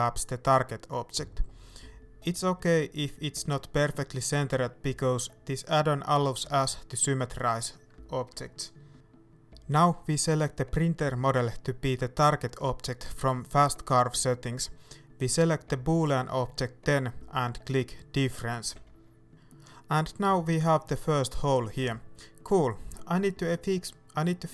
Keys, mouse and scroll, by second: 0.8-5.1 middle drag, 2.0 KP_1, 5.1-11.0 right drag, 11.0-13.6 drag, 13.6-15.9 shift+middle drag, 15.9 click, 16.7 middle click, 17.5 right click, 18.0 g, 18.6 right click, 19.1 shift+middle click, 19.5 right click, 19.7 g, 22.2 right click, 22.5-24.5 middle drag.